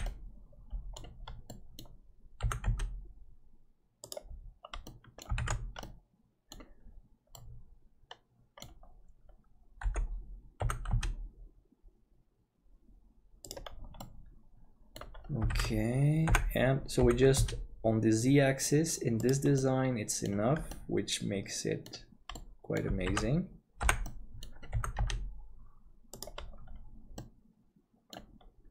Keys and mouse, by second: 0.1-1.1 middle drag, 1.6 middle click, 2.4 g, 4.8 middle click, 5.4 alt+a, 5.8 middle click, 7.3-8.7 middle drag, 9.8 l, 10.6 g, 14.1-15.3 middle drag, 15.5 alt+a, 16.3 l, 17.0 g, 19.6 middle click, 20.0 click, 20.7-21.9 drag, 22.4 click, 23.1 alt+a, 23.8 l, 24.2 middle click, 24.7 g, 27.2-28.2 middle drag.